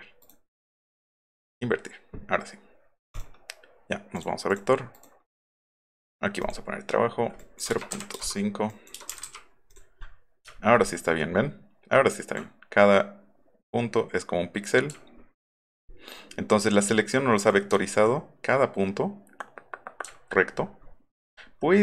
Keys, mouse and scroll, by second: 0.2 right click, 1.4 click, 3.1 right click, 4.1 click, 4.5 click, 4.9 right click, 6.4 click, 7.4 click, 7.7 KP_0, 8.7 click, 9.0 KP_0, 9.3 KP_5, 9.7 click, 10.6 alt+scroll up 1, 11.9 alt+scroll down 2, 14.9 alt+middle click, 15.5-16.0 alt+scroll up 4, 16.5 alt+scroll down 2, 20.1 alt+middle click, 20.3 alt+middle click, 20.6 alt+middle click, 20.8 alt+middle click, 21.3-21.8 alt+scroll up 7.